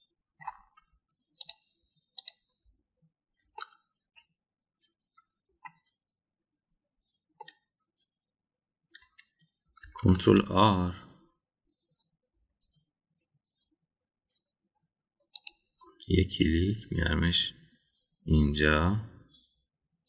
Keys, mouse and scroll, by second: 0.2 scroll down 1, 0.7-1.5 middle drag, 2.4 click, 3.1 click, 4.6-6.4 middle drag, 8.3-9.9 middle drag, 11.1 ctrl+r.